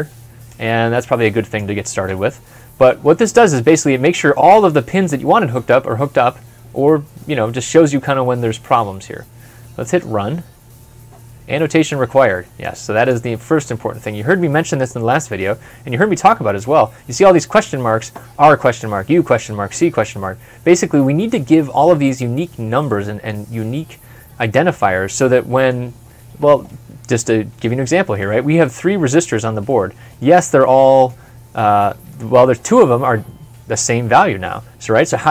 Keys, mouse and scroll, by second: 15.4-16.1 scroll up 1, 20.0 scroll up 1, 20.1 scroll down 1, 20.4 scroll up 1, 20.9 middle click, 21.2 scroll up 1, 21.8 scroll down 1, 22.6 middle click, 27.5 scroll down 1, 28.2 middle click, 28.4 scroll up 1, 29.5 middle click.